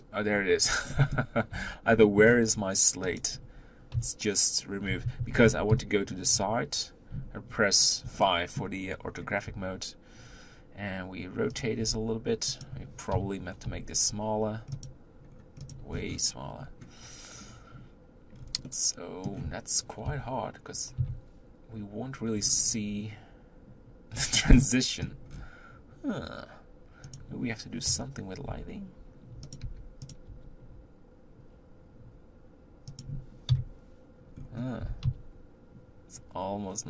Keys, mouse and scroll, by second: 0.3-0.9 scroll up 2, 0.9-1.5 middle drag, 1.5 h, 2.0-3.2 scroll up 3, 2.0 middle click, 3.2 click, 3.9-6.3 typing, 8.3-9.0 shift+middle drag, 9.0 scroll up 1, 9.5 r, 11.8 g, 13.1 KP_1, 14.8 click, 15.3 scroll up 2, 15.8 click, 16.0-16.4 scroll down 4, 16.7-17.4 scroll up 3, 18.4-18.7 scroll down 4, 18.7-20.0 middle drag, 20.0 KP_3, 21.0 KP_1, 22.4-24.1 scroll up 2, 24.1-24.6 scroll down 6, 24.6 middle click, 25.3-26.0 scroll down 2, 26.0-26.8 scroll down 1, 26.8-27.2 scroll down 1, 27.2 click, 27.9 KP_7, 28.5 r, 33.5 KP_1, 34.4-34.9 scroll up 3, 34.9 r.